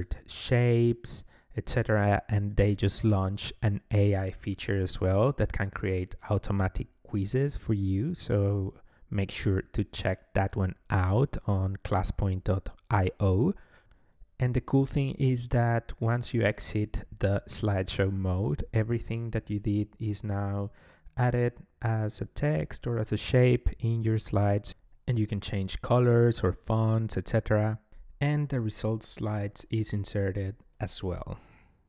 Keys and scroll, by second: 10.1-13.5 typing, 24.8 BackSpace, 31.1 Left.